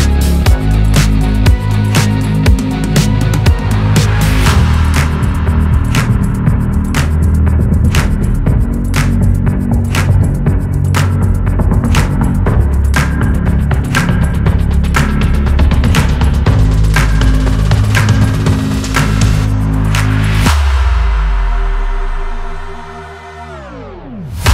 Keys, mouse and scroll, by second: 0.7 click, 1.3 r, 3.9 r, 5.9 r, 9.0-9.9 scroll up 2, 9.9 r, 13.2 click, 13.4-14.2 scroll up 1, 14.2 click, 14.8-18.4 typing, 15.3 click, 16.0 click, 16.6 click, 17.4 scroll up 2, 18.3 click, 19.5 g, 20.2 shift+middle click, 20.6 click, 22.0 g, 22.7-23.1 scroll down 4, 23.1 click, 23.3-23.6 scroll up 2, 23.6 click, 23.9 scroll up 1, 24.2 click.